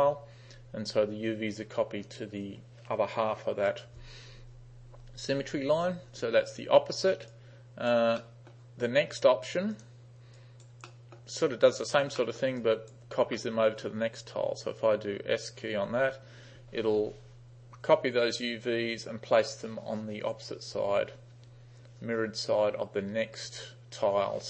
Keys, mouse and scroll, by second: 7.3-7.9 right drag, 8.3 middle drag, 9.8 click, 10.4 right click, 10.9-11.2 middle drag, 12.2 middle click, 12.6 right click, 13.4 middle click, 15.8 s.